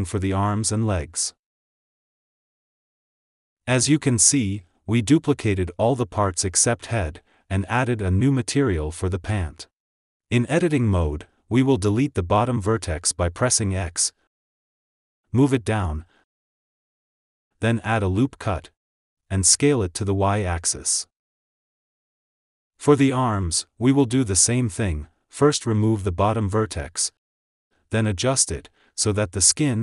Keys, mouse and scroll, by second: 0.0 click, 0.5 shift+d, 2.6 click, 4.3 alt+z, 6.1 Tab, 7.1-8.3 shift+middle drag, 11.9 click, 12.7 alt+z, 13.5 x, 15.0 g, 18.5 ctrl+r, 19.8 KP_3, 20.6 s, 22.7 KP_1, 22.8 Tab, 24.4 click, 26.6 x, 29.1 alt+z, 29.3 click.